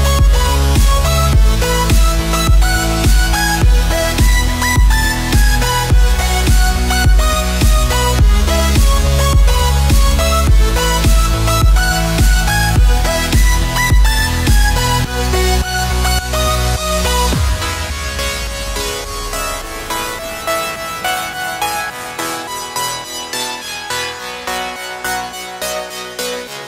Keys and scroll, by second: 18.9 alt+a.